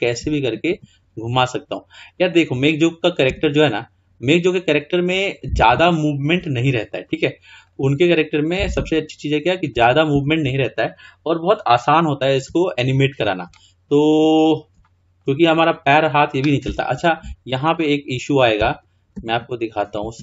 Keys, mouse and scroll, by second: 2.2 click, 3.3 r, 6.5-7.7 scroll down 2, 7.7 click, 9.1 r, 10.6-11.3 scroll down 2, 11.3 scroll up 3, 11.6-13.0 scroll down 2, 13.0-13.6 scroll up 3, 13.6 shift+middle click, 14.4-14.9 scroll up 2, 14.9-15.9 shift+middle drag, 15.9 drag, 17.8-18.2 drag, 19.2 e, 19.3 e, 20.0 Escape.